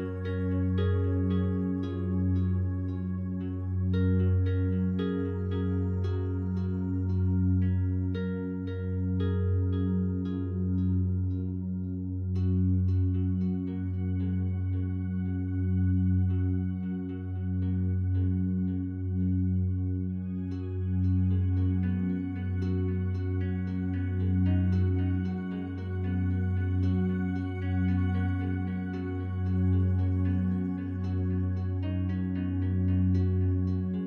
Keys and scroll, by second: 17.3 ctrl+d, 25.2 ctrl+d.